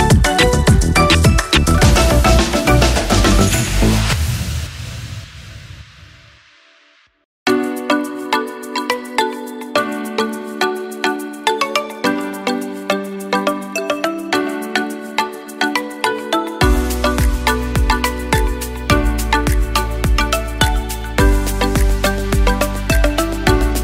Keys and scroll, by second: 0.2 Delete, 1.3 Delete, 2.4 Delete, 4.8 Delete, 8.0 Delete, 9.7 Delete, 10.7 Delete, 11.8 Delete, 12.2 ctrl+z, 12.8 Delete, 14.2 Delete, 17.7 Delete, 19.0 ctrl+z, 21.3 ctrl+-.